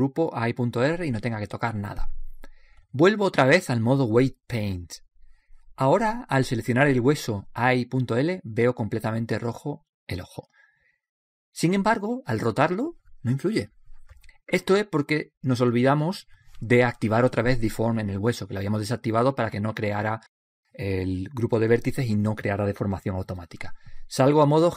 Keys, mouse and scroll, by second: 4.1-5.3 drag, 5.8 click, 8.5-10.7 right drag, 11.3-12.2 scroll up 1, 12.2-13.4 middle drag, 13.4-14.1 scroll down 1, 14.4 r.